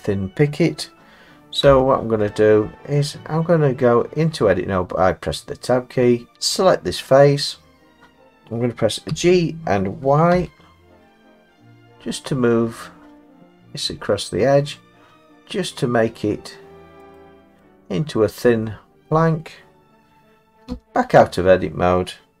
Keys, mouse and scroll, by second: 1.7 Tab, 2.6 middle click, 3.0 middle click, 6.3 click, 8.2 ctrl+z, 9.1 g, 10.3 y, 17.2 click, 17.6 middle click, 18.0 middle click, 18.7 middle click, 20.3 middle click, 20.7 Tab.